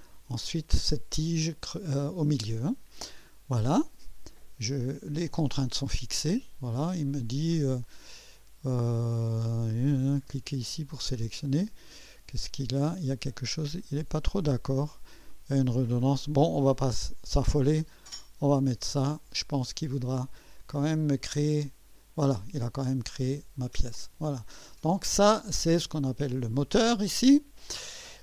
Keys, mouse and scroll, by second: 11.2 click, 13.8-14.6 drag, 14.8 scroll up 1, 15.3-15.9 right drag, 18.4 click, 19.3 scroll down 1, 19.7 scroll up 1, 21.3 click, 22.8-25.0 drag, 25.8 click.